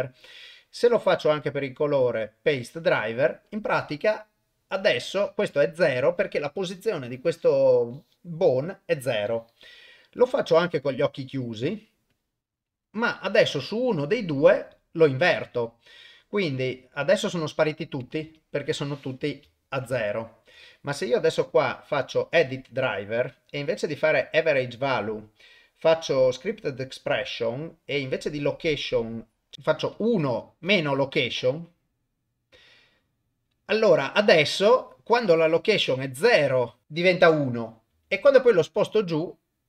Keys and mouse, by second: 1.0 click, 1.6 right click, 10.2 click, 11.1-12.2 right drag, 18.2 KP_0, 19.5 shift+middle drag, 20.0-20.5 ctrl+middle drag, 21.6-36.3 right drag, 36.8 ctrl+Tab, 36.8 click, 37.9 g.